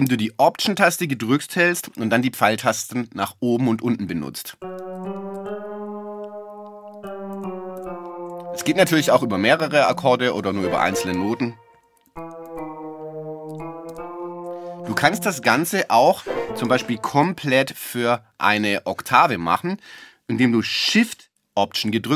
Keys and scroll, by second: 4.5 alt+Up, 6.9 alt+Down, 12.1 alt+Down, 13.5 alt+Up.